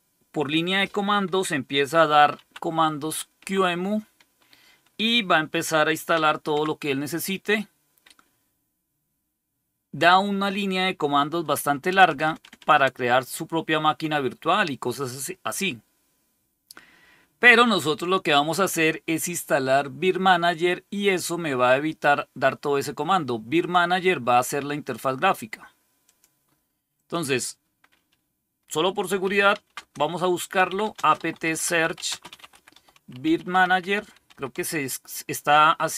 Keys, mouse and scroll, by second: 1.4-2.8 typing, 3.3 Tab, 6.0 Tab, 6.4 Tab, 11.8-12.5 typing, 23.5 click, 25.9 click, 26.9 click, 28.7-34.9 typing.